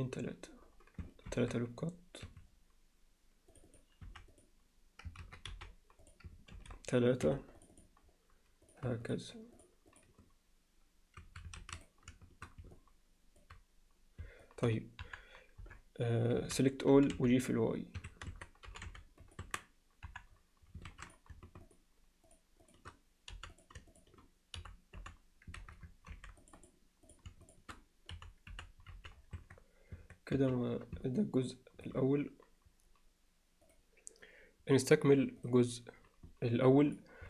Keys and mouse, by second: 1.3 ctrl+r, 3.7 click, 4.1 x, 5.2 ctrl+z, 5.5 x, 6.6 ctrl+r, 9.9 shift+click, 11.2 a, 12.8-13.4 alt+middle drag, 14.5 alt+middle click, 15.0 KP_1, 15.6 KP_7, 16.4 a, 16.9 g, 18.3 Tab, 18.7 g, 19.5 Tab, 20.1 KP_1, 20.9 alt+a, 21.6 shift+click, 22.7 shift+click, 23.4 f, 23.5 click, 23.9 shift+click, 24.6 f, 25.0 f, 25.6 ctrl+z, 26.1 ctrl+r, 27.1 click, 27.5 shift+drag, 28.2 f, 28.5 f, 28.9 z, 29.4 Tab, 30.0 Tab, 30.4 z, 31.2-31.9 ctrl+alt+middle drag.